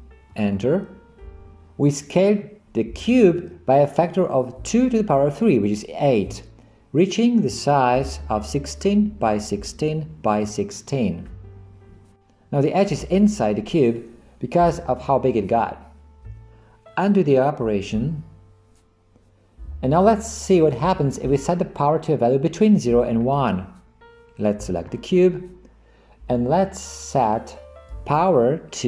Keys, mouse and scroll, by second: 17.3 ctrl+z, 17.9 ctrl+z, 28.7-28.8 drag.